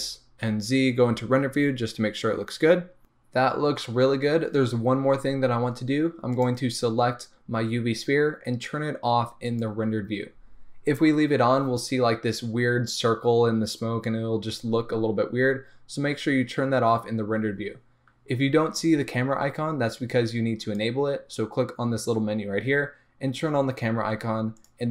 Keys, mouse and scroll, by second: 1.3 z, 6.7 click, 9.6 click.